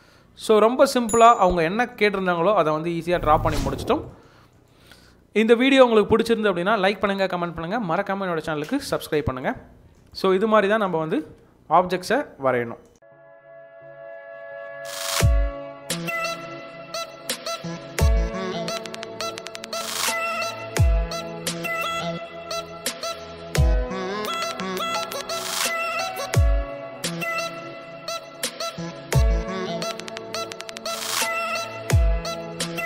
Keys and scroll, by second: 11.2 space.